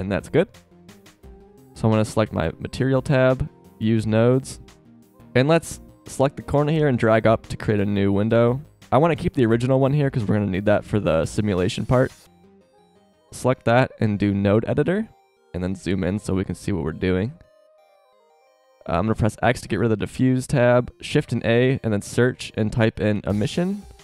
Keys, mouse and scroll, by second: 16.1 click, 17.0 click, 17.2 drag, 19.4 x, 19.9 shift+a.